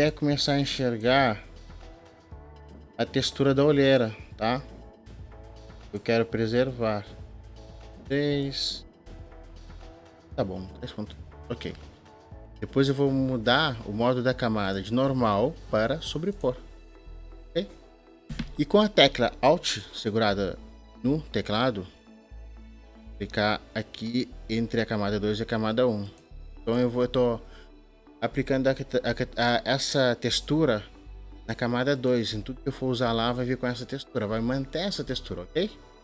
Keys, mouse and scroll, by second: 26.2-31.8 alt+drag.